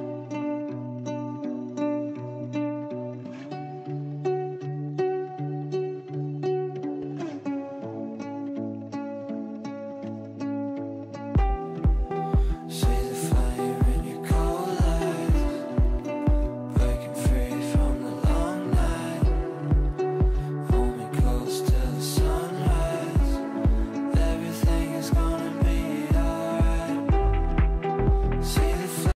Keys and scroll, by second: 16.7 f, 19.8 shift+F2, 21.0 F9.